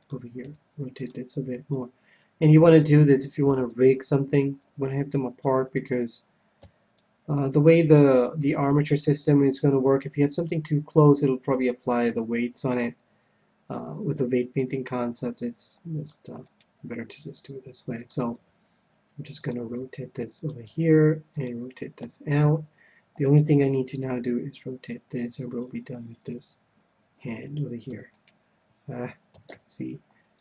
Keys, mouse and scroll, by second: 0.4 r, 1.3 g, 2.1 g, 3.7-5.5 drag, 4.6 a, 6.2 a, 6.6 c, 16.5-18.2 right drag, 17.3 r, 18.2-23.2 drag, 18.3 g, 19.8 r, 20.6 g, 21.9 a, 23.3 c, 24.0 c, 28.1-29.9 right drag, 29.3 ctrl+z.